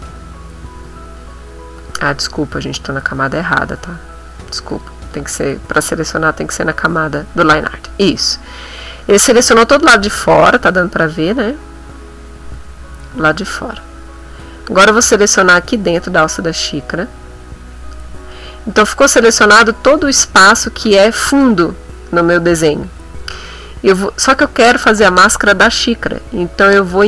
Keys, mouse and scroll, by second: 0.8 ctrl+z, 1.8 click, 3.1 click, 3.9 click, 4.7 click, 10.2-11.3 ctrl+middle drag, 11.5 ctrl+middle click, 12.7 ctrl+middle click, 13.5 ctrl+middle click, 16.3 click, 18.4-19.6 ctrl+middle drag, 19.7 ctrl+middle click, 20.8 ctrl+middle click.